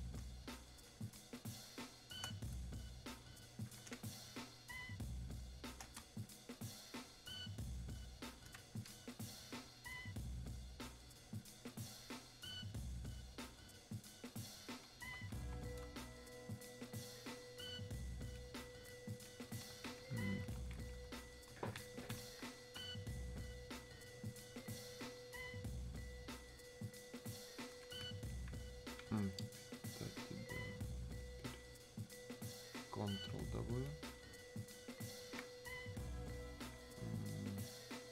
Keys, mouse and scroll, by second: 1.7 click, 1.8 space, 3.5 click, 3.9 space, 6.2-23.8 shift+drag, 23.8-35.4 drag.